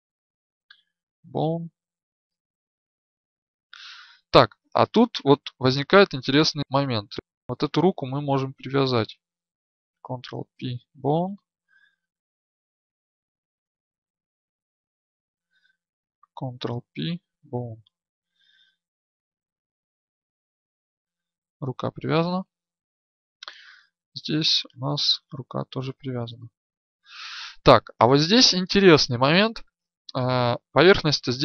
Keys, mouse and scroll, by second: 0.0 ctrl+p, 6.7 right click, 10.0 ctrl+p, 12.7 right click, 16.5 ctrl+p, 19.5 a, 20.9 right click, 22.8 ctrl+z, 23.7 right click, 24.9 click, 25.6-26.6 middle drag, 26.6 ctrl+z, 30.5 right click.